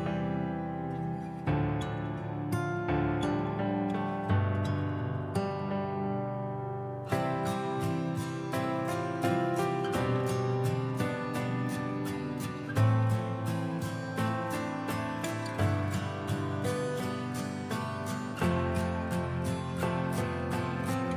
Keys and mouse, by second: 0.9 click, 1.6 click, 2.3 click, 3.3-4.9 drag, 6.0-6.4 drag, 6.5 n, 6.9 click, 8.0 shift+d, 8.3 r, 9.2 click, 9.6 click, 10.1 r, 11.1 click, 11.7 click, 12.8 click, 13.1 click, 13.7-14.9 drag, 14.9 r, 17.3 shift+a, 18.6 click, 19.8-20.1 drag, 20.9 click, 20.9 0.